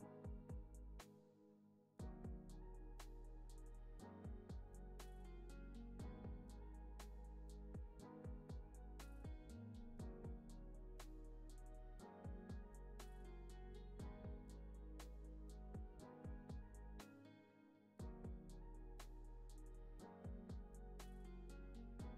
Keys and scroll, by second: 4.0 u, 17.4 z, 18.7 x.